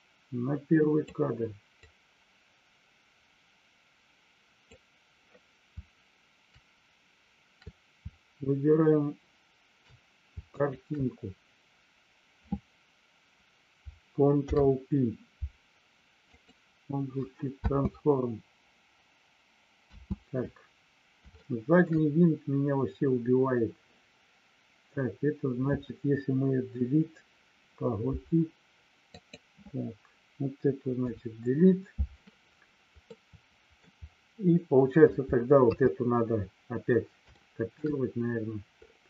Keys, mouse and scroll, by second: 1.9-4.9 drag, 10.6 shift+click, 17.6 space, 21.3 shift+middle click, 29.1 click, 31.1 Delete, 33.0 middle click, 35.7 KP_3, 37.3 shift+middle click.